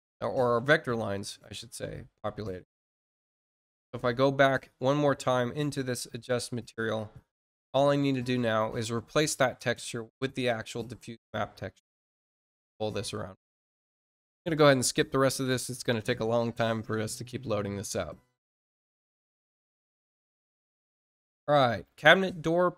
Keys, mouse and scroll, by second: 17.0 click, 19.0 click.